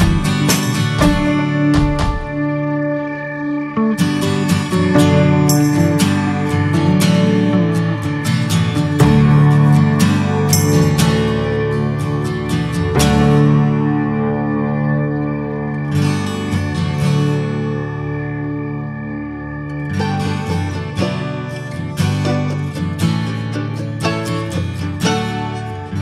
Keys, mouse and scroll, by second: 0.2 ctrl+z, 1.0 shift+middle click, 1.2-2.0 scroll up 3, 4.6 click, 5.0 scroll down 2, 5.4 ctrl+z, 10.8 scroll up 4, 11.3 middle click, 11.6 scroll down 1, 11.9-13.3 middle drag, 13.3-14.6 drag, 14.6-15.0 scroll down 3, 15.0 middle click, 15.6 scroll up 1, 16.2 middle click, 16.3 scroll up 2, 16.6-18.1 middle drag, 18.1-19.2 drag, 19.2 ctrl+z, 20.0-21.6 drag, 21.6 ctrl+z, 22.3-23.5 drag, 23.5-24.4 scroll down 5, 23.8 middle click, 24.9 shift+middle click, 25.0-25.8 scroll up 1, 25.8-26.0 drag.